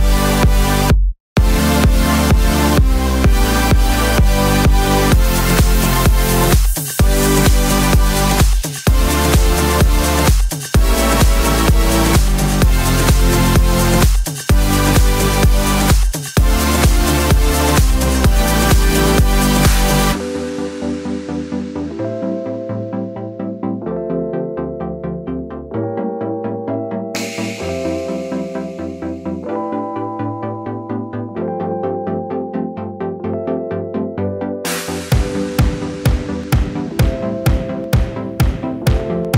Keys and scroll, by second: 0.7 Up, 4.6 super+c, 4.7 super+v, 13.8 Page_Up, 17.4 Page_Down, 26.3 super+c, 26.4 super+v, 34.5 l.